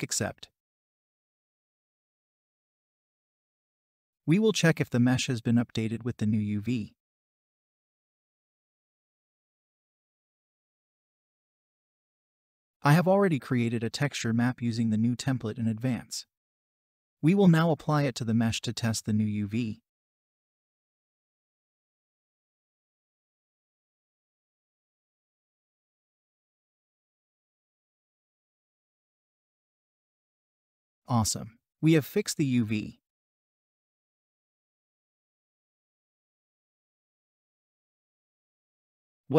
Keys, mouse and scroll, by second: 25.6 double click, 31.3-32.0 scroll down 1.